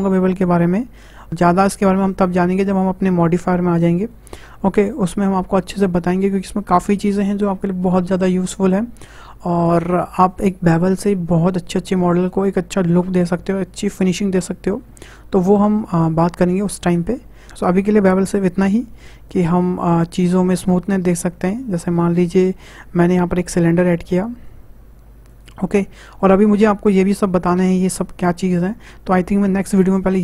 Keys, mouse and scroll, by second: 17.5 middle click, 19.3-20.9 drag, 20.9 Tab, 21.4-22.4 middle drag, 22.4 Delete, 23.7 shift+a, 26.4 shift+a.